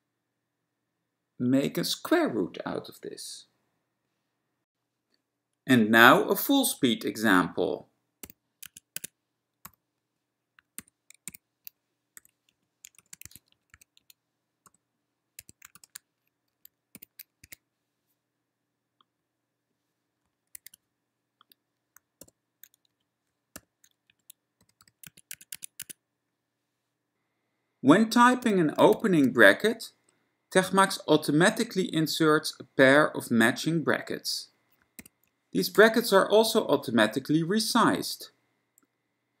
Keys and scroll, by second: 1.8 alt+s, 8.4 f, 8.7 Tab, 9.0 Tab, 9.8 =, 10.8 f, 11.5 shift+s, 12.3 5, 12.6 Right, 13.4 1, 13.6 Down, 13.9 2, 14.1 Right, 14.8 =, 15.6 1, 17.0 f, 17.6 1, 20.6 super+w, 22.3 ctrl+y, 23.0 Left, 23.6 ctrl+y, 24.2 Left, 24.8 ., 25.0 ., 25.1 Tab, 25.4 Tab, 25.6 Tab, 25.9 Tab, 28.6 f, 29.1 (, 35.1 f, 35.9 x, 36.2 Down, 36.6 y, 37.5 Left, 37.8 Left.